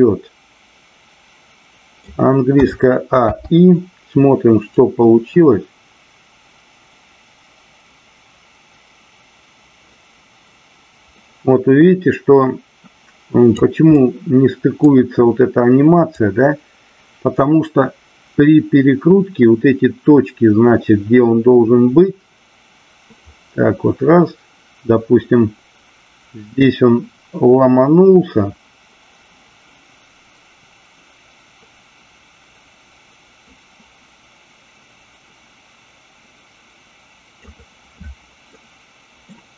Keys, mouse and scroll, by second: 4.8-13.7 drag, 13.9-14.8 middle drag, 16.1-37.4 drag, 38.6-39.3 middle drag.